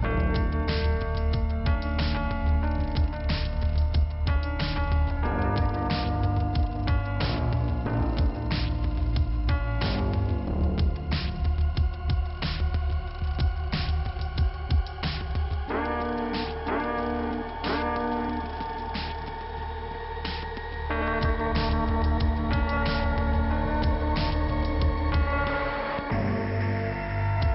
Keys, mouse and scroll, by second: 0.3 click, 6.2-7.3 scroll down 2, 8.6 middle click, 9.5-10.1 scroll up 1, 10.4 click, 14.2 click, 15.2 scroll up 1, 15.2 click, 15.7-16.3 scroll up 1, 16.3 click, 16.7 click, 18.7-19.4 scroll down 1, 19.8 click, 20.3 click, 22.9 scroll up 1, 23.5 click, 25.1 middle click, 25.5-26.4 scroll down 1, 26.8 click.